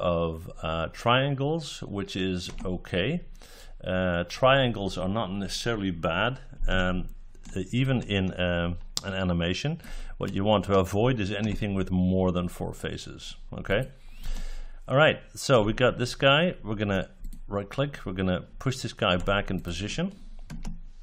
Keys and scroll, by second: 20.4 space.